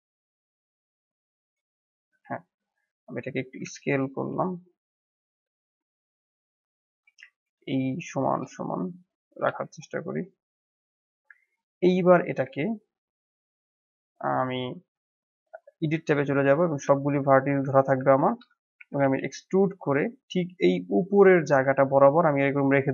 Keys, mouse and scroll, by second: 0.0-1.8 drag, 1.9 click, 3.0-3.4 drag, 3.4 scroll up 1, 3.7-4.2 shift+middle drag, 4.2 s, 5.7-6.0 scroll up 1, 6.0-7.4 shift+middle drag, 7.4 s, 9.2 g, 11.0 scroll down 3, 12.6-15.5 shift+middle drag, 15.7 Tab, 18.2 a, 18.7 e, 21.3 scroll up 2, 21.7-22.9 shift+middle drag.